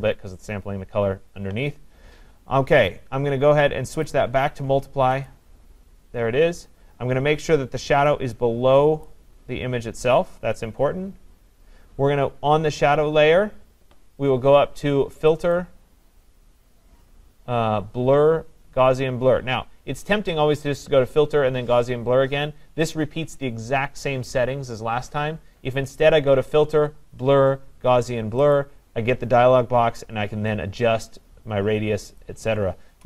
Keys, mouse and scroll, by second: 4.1 click, 5.4 click, 9.1 click, 12.2-14.1 drag, 15.5-20.6 drag, 28.6-32.2 drag.